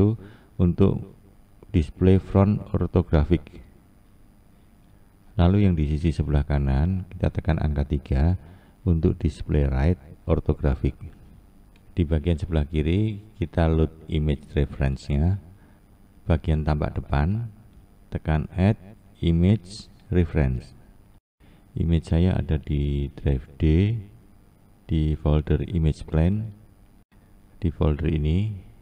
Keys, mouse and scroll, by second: 3.8 click, 4.8 KP_3, 15.5-18.5 drag.